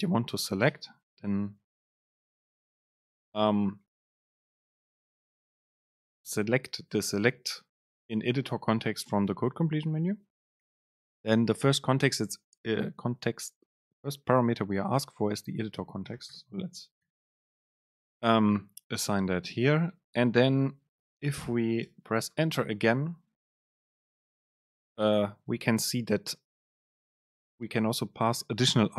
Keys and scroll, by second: 0.7 super+space, 17.8 super+space, 22.1 Return.